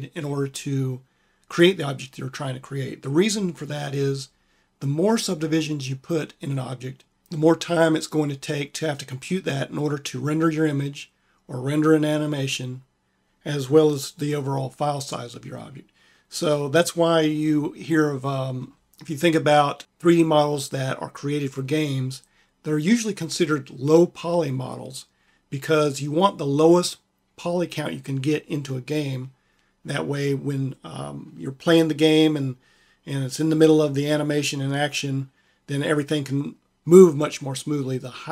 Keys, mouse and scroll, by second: 18.0-21.0 middle drag.